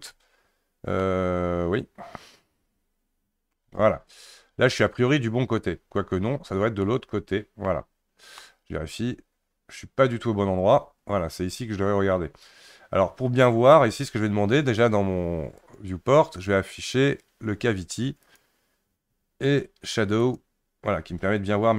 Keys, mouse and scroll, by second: 1.0-4.0 middle drag, 6.8 alt+middle click, 8.4-11.4 middle drag, 15.6-18.8 drag.